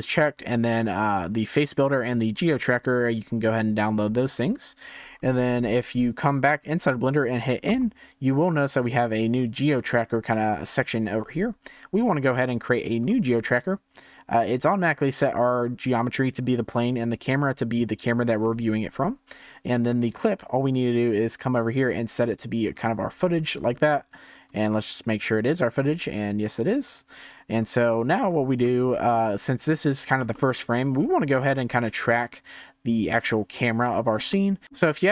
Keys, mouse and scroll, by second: 7.6 n, 9.3 click, 12.9-16.0 drag, 20.9-23.9 drag, 24.4-27.4 drag, 27.5 click, 28.2-28.7 scroll up 4, 28.7-33.3 shift+middle drag, 33.8-34.2 scroll down 1, 34.2-35.1 shift+middle drag.